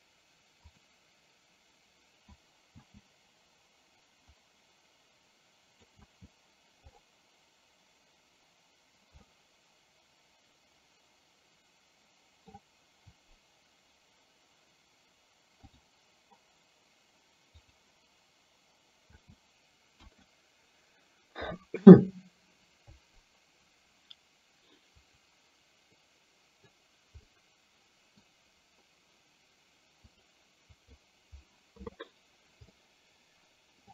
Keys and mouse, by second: 1.0 click, 3.0 space, 4.6-6.0 drag, 6.2 space, 9.5-12.9 middle drag, 18.0 click, 19.2 space, 20.0 KP_1, 26.1 middle click, 27.4 middle click, 30.4 click, 32.7-33.9 middle drag.